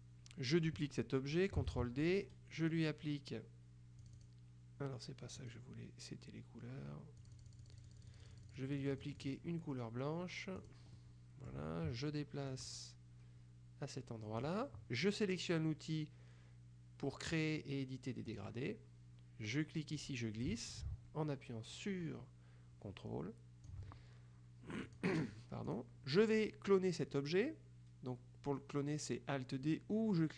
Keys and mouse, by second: 1.8 ctrl+d, 4.2 click, 5.5 click, 7.3-10.0 drag, 10.7 click, 12.6-15.0 drag, 18.4 click, 20.0-24.2 drag, 25.0 click, 25.8 click.